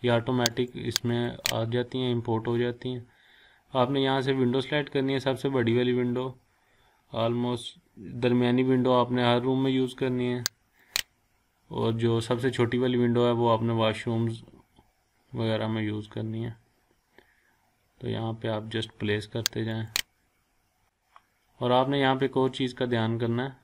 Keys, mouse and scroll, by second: 0.5 click, 10.8 click, 12.8-13.5 scroll down 1, 13.5-15.4 scroll up 1, 15.5-17.4 scroll up 1, 20.0 click, 20.3-20.7 scroll up 1, 20.7-21.9 scroll down 1, 21.9-22.7 scroll up 1, 22.7-23.6 scroll up 1.